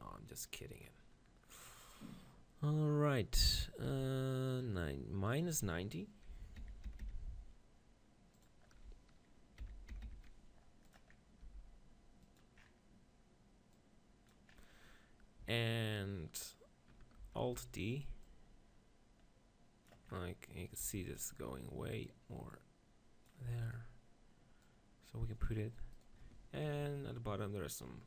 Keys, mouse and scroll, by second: 0.8-2.7 drag, 3.9 r, 4.6-7.2 drag, 6.6 -, 6.9 9, 7.0 0, 8.3-10.2 drag, 11.4 middle click, 11.4 g, 12.4-15.6 drag, 17.4 alt+d, 18.2-20.0 drag, 18.2-19.6 right drag, 20.8-23.0 right drag, 20.9 Tab, 22.0-23.8 drag, 23.5 Tab, 23.7 right click, 24.0-26.6 drag, 24.6-27.8 right drag, 27.8 middle click.